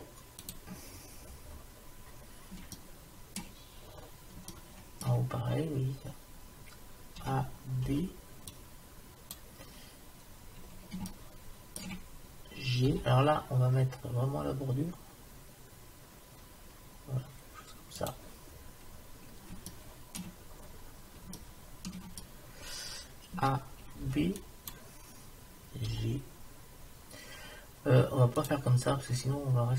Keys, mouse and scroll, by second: 1.0 middle click, 2.9 middle click, 3.4-6.4 middle drag, 7.2 a, 7.9 b, 10.3-11.5 middle drag, 11.7-13.1 middle drag, 12.9 g, 18.7 middle click, 19.1 middle click, 19.8-23.4 middle drag, 23.4 a, 24.0 b, 25.9 g, 28.9 middle click.